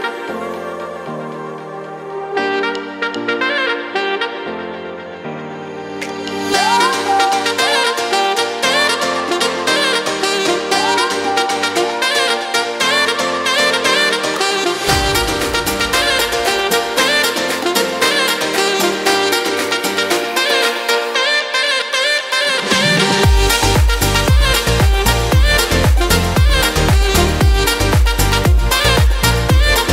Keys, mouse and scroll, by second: 17.1 F4, 19.8 middle click, 22.5 t, 25.6 click, 26.7 F4.